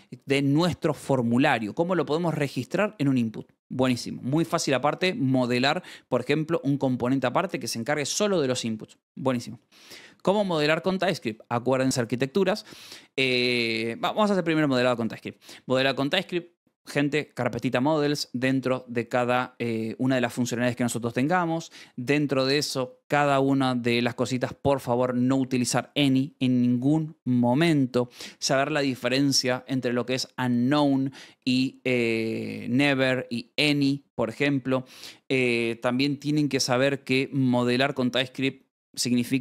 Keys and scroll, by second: 3.1 Escape, 9.7 j, 10.0 shift+v, 12.2 Escape, 12.4 k, 14.6 v, 14.8 Escape.